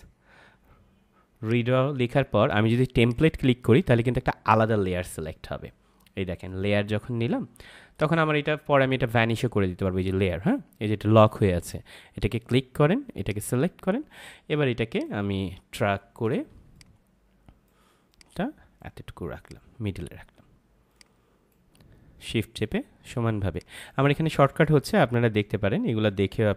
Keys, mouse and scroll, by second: 0.6-1.4 scroll down 1, 1.4 click, 7.9 click, 12.4 click, 16.7 shift+click, 20.9 shift+click, 23.5 shift+click.